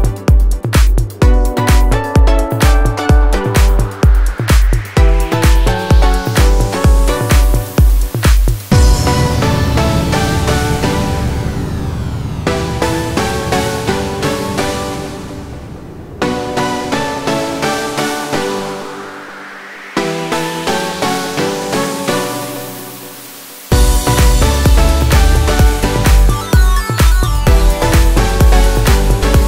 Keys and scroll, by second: 20.7 Escape, 28.3 l, 28.4 space.